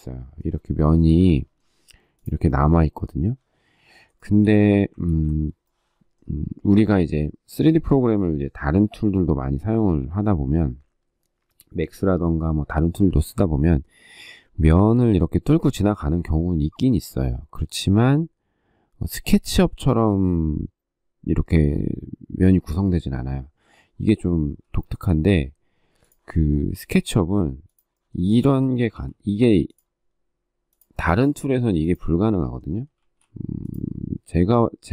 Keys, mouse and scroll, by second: 0.6 shift+middle click, 4.0 shift+middle click, 4.8 ctrl+z, 24.5 shift+middle click, 28.7 typing, 31.0 space, 31.9 shift+middle click, 32.0 shift+double middle click, 32.2 shift+middle click, 32.8 shift+e.